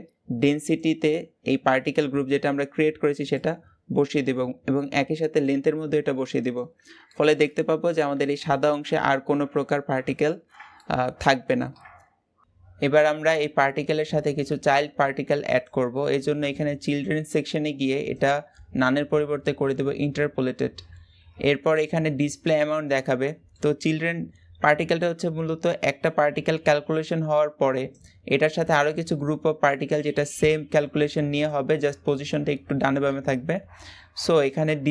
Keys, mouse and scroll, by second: 3.2 click, 6.4-6.8 drag, 6.8-18.0 shift+middle drag, 18.0 click, 20.0-22.3 scroll up 1, 22.3-34.9 middle drag.